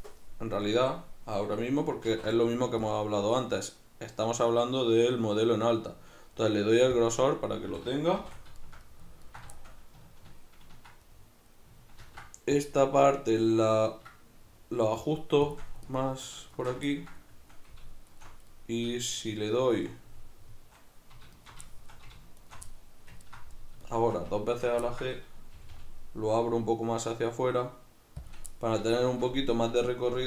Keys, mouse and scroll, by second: 0.6-7.1 shift+middle drag, 2.1 alt+e, 7.1 shift+click, 7.7 a, 8.2 shift+n, 8.6-15.9 shift+middle drag, 12.0 ctrl+r, 15.5 shift+click, 15.9 alt+right click, 15.9 middle click, 16.5 alt+shift+right click, 16.6-18.1 ctrl+middle drag, 18.1 alt+shift+right click, 18.2-21.3 middle drag, 21.3 alt+shift+right click, 21.7 shift+middle click, 22.4 alt+shift+right click, 22.7-24.6 middle drag, 24.6 alt+shift+right click, 24.9-28.4 ctrl+middle drag, 25.6 g, 28.4 shift+click, 28.6-30.2 middle drag.